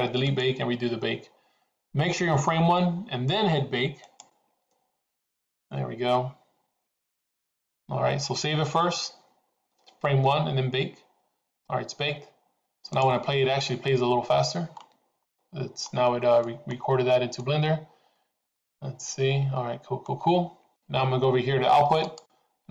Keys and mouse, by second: 0.2 click, 4.0-10.4 drag, 12.8 click, 15.2 middle click, 16.4 middle click, 17.3-20.2 middle drag, 22.2 click.